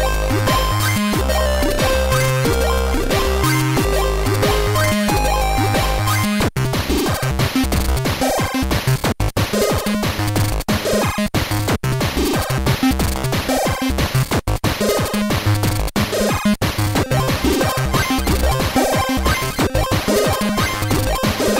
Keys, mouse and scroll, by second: 1.0-2.0 drag, 4.6 click, 7.7 click, 9.5 i, 13.9 click, 15.7 click, 18.4-20.7 drag, 20.9 BackSpace.